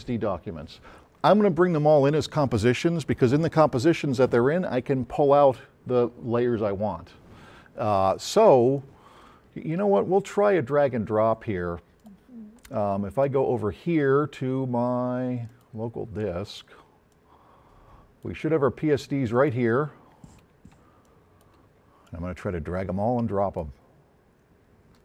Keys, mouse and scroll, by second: 9.2-10.8 drag, 13.2 click, 15.5 click, 17.2 click, 18.4-19.3 drag, 19.4 click, 21.1 shift+click.